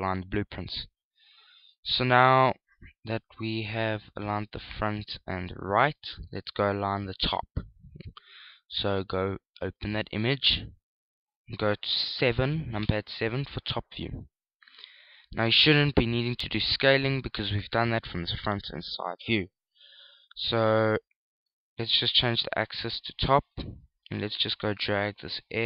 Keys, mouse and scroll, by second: 2.4 shift+middle click, 6.5 click, 7.2 click, 9.7 click, 13.5 KP_7, 22.8 click, 25.4 shift+click.